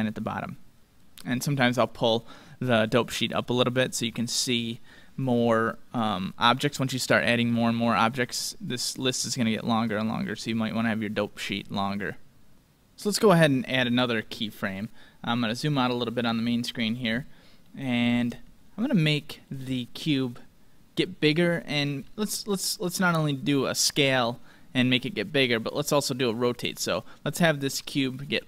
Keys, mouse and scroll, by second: 1.0-3.0 drag, 10.8-12.6 drag, 15.5-16.3 scroll down 1, 16.3-17.6 scroll up 1, 17.6-22.1 middle drag.